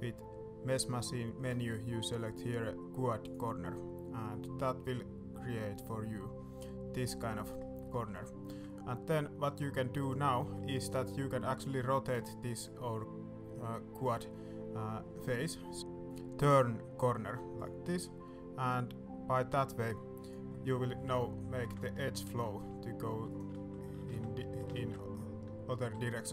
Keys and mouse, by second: 7.3 right click, 7.7 middle click, 8.4 ctrl+r, 11.9 click, 14.1-20.2 drag, 20.2 right click, 20.4 middle click, 21.4 middle click, 22.3 ctrl+t, 23.3 ctrl+click, 23.9 ctrl+z, 24.7 ctrl+shift+z, 25.8 ctrl+r.